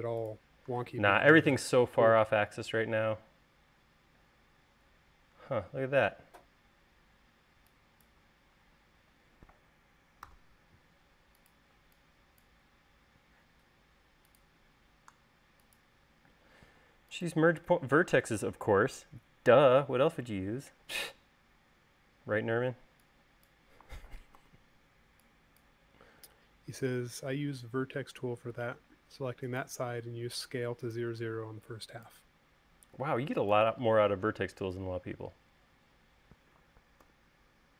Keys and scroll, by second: 10.8 v, 16.8 space, 34.9 space, 37.5 u.